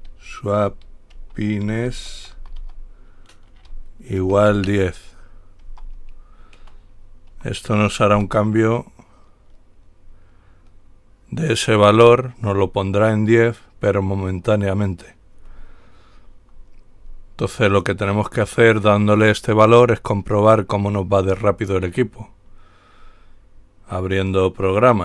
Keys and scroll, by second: 0.0-2.8 typing, 4.4 typing, 5.9-8.3 typing.